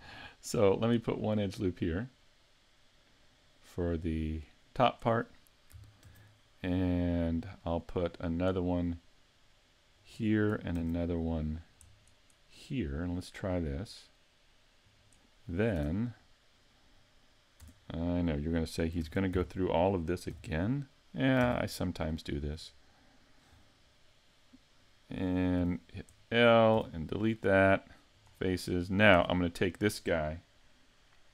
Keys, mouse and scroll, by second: 2.9 ctrl+r, 4.9 click, 6.1 ctrl+r, 10.1 click, 10.8 ctrl+r, 15.0 click, 15.8 Tab, 17.6 Tab, 19.0 ctrl+Tab, 20.3 l, 21.4 ctrl+Tab, 23.7 middle click, 25.6 l, 26.2 middle click, 26.8 x, 29.1 l, 29.2 Tab.